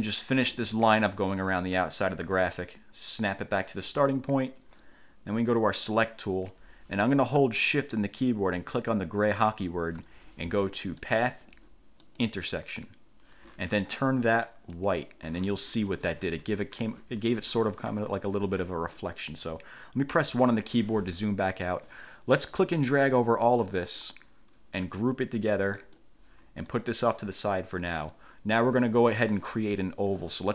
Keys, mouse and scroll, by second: 0.1 click, 0.6 click, 1.1 click, 1.5 click, 3.5 click, 6.0 click, 9.4 shift+click, 11.2 click, 12.2 click, 14.9 click, 19.1 click, 20.3 1, 22.7-24.3 drag, 25.9 click, 26.9-28.5 drag.